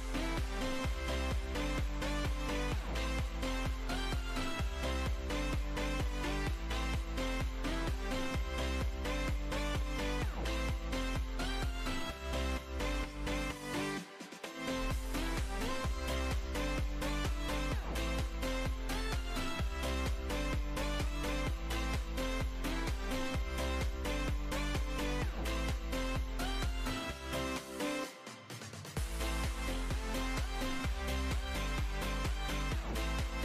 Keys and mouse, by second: 0.2 middle click, 1.2 ctrl+r, 2.9-4.9 typing, 4.2 click, 4.3 click, 5.5 click, 7.3 z, 7.5 Tab, 8.7 KP_1, 8.9 z, 10.2 Tab, 10.9 e, 12.9 ctrl+r, 14.4 g, 14.9 e, 15.3 g, 16.2 Delete, 17.0 click, 17.7-20.5 typing, 19.8 Tab, 21.9 Tab, 22.5 ctrl+r, 23.1 ctrl+r, 24.4 b, 25.0 b, 25.1 g, 26.1 b, 26.5 g, 27.4 Tab, 28.3 Tab, 28.5 ctrl+r, 28.9 ctrl+r, 29.6 ctrl+r, 29.6-31.7 typing, 30.2 ctrl+r, 30.6 ctrl+r, 32.3 ctrl+r, 32.9 ctrl+r, 33.0-33.4 typing.